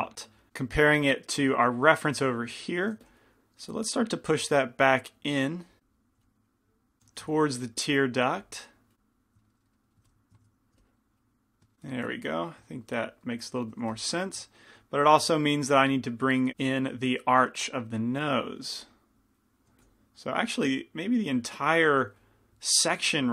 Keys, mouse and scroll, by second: 3.0 f, 5.1-7.5 drag, 6.2 f, 7.2 f, 8.4 f, 9.3 click, 9.3 right click, 9.7 middle click, 10.1 click, 10.1 right click, 10.6 ctrl+z, 10.8 f, 10.9 middle click, 11.5 click, 11.5 right click, 14.0 f, 16.0 f, 16.6 f, 17.8-22.9 drag, 18.8 f, 19.9 f, 21.9 f.